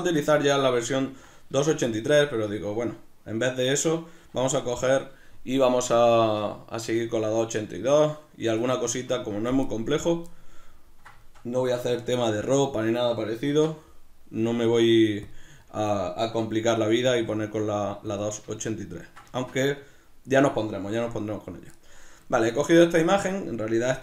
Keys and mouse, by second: 1.5 shift+a, 9.9 right click, 10.6-17.2 ctrl+middle drag, 13.5 shift+s, 17.2 s, 18.2 click, 18.6 ctrl+middle click.